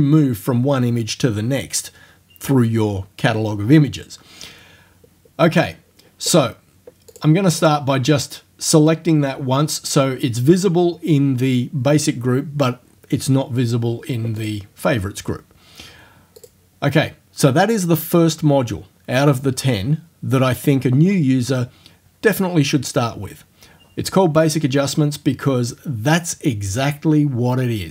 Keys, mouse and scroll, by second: 7.1 click, 7.6 click, 14.4 click, 16.4 click, 24.5 click.